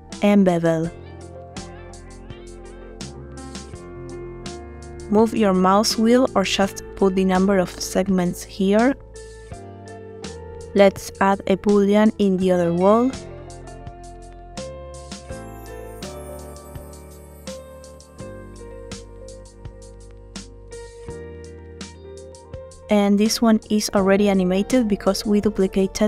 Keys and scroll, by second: 1.7 ctrl+b, 9.1 Tab, 23.9 space.